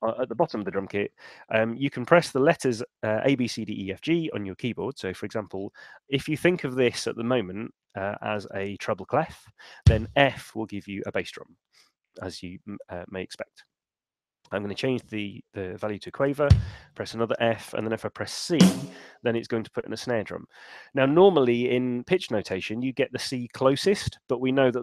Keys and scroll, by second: 9.8 f, 14.0 5, 16.4 f, 18.4 c.